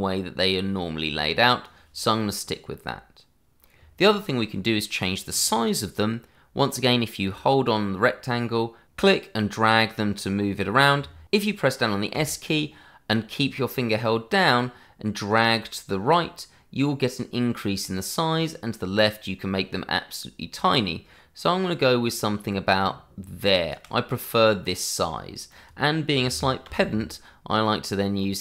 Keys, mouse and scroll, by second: 8.8 click, 23.7 s, 25.5 click.